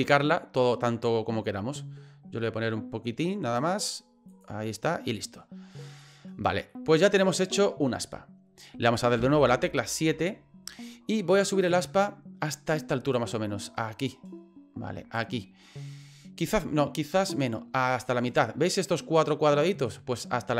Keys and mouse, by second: 4.3 click, 5.1 middle click, 6.0 middle click, 6.7-7.9 middle drag, 9.2 KP_7, 13.1-15.2 drag, 17.3-18.4 drag.